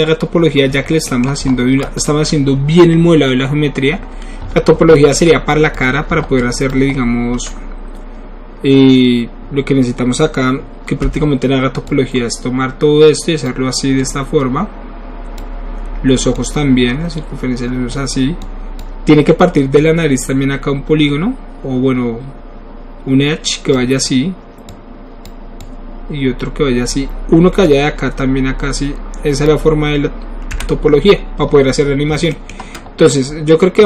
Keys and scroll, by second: 11.1 KP_Divide, 30.6 KP_Divide.